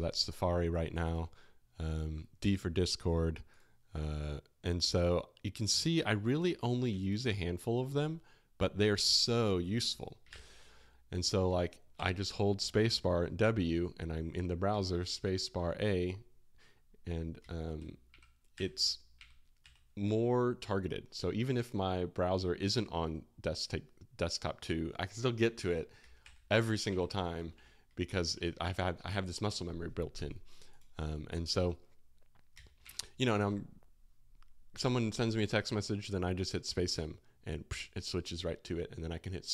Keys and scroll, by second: 10.2 super+w, 11.6 space, 11.9 space, 11.9 w, 14.6-15.1 typing, 17.3-19.6 typing, 25.9-28.5 typing, 32.5-33.3 typing.